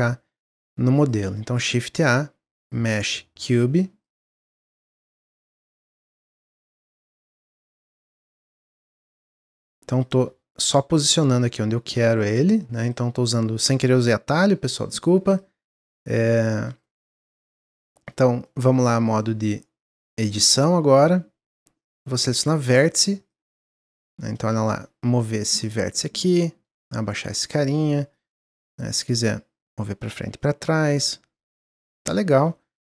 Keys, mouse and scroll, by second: 0.9 click, 1.4 shift+a, 3.5 click, 4.3 s, 5.8 click, 6.7 s, 8.3 click, 9.4-10.9 drag, 10.9 middle click, 11.0-11.4 scroll up 3, 11.4-11.8 middle drag, 11.8 scroll down 1, 12.8 click, 15.3-16.3 drag, 16.8-18.1 middle drag, 18.1 scroll up 1, 18.4-20.6 middle drag, 20.6 Tab, 27.8 middle click, 28.1 click, 28.9-30.4 drag, 30.4-32.4 middle drag, 32.4-32.9 scroll down 1.